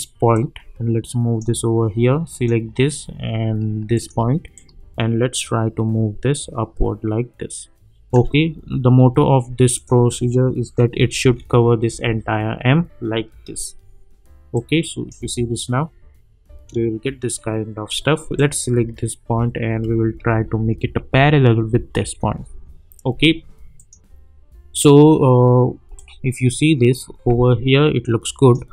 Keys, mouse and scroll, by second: 3.9 shift+click, 4.5-8.3 drag, 10.9 Right, 13.2-13.9 scroll down 1, 14.5-15.1 click, 15.1 space, 18.3 click, 18.9-19.4 alt+scroll up 1, 19.9 Up, 22.4-23.3 scroll down 1, 23.7-28.7 drag.